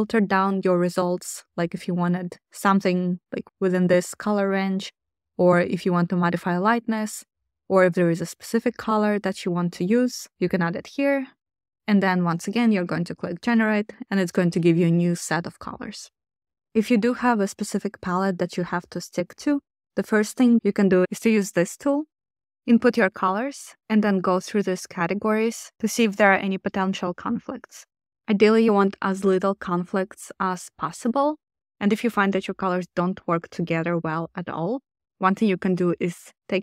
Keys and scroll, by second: 36.4 super+c.